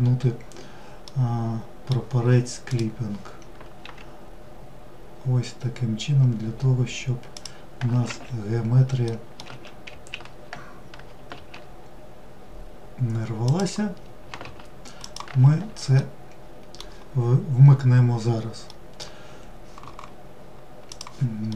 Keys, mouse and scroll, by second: 0.0-1.7 middle drag, 1.7 click, 8.0 middle click, 8.5 alt+s, 14.0 click, 15.0-16.9 middle drag, 16.9-17.7 scroll down 1, 17.7-19.8 middle drag, 20.3-21.5 middle drag.